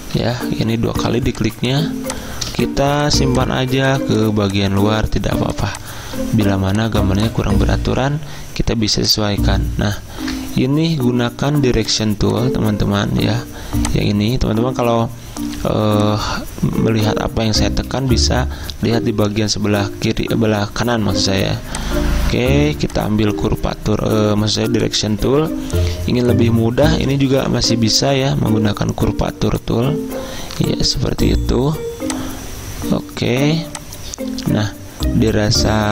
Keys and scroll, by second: 0.0 ctrl+z, 10.1 ctrl+z, 18.1-19.8 typing.